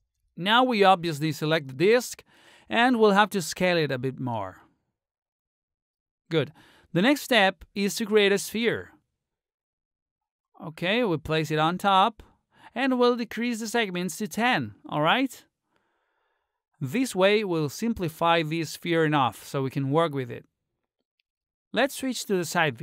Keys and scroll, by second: 14.0 1, 14.3 0.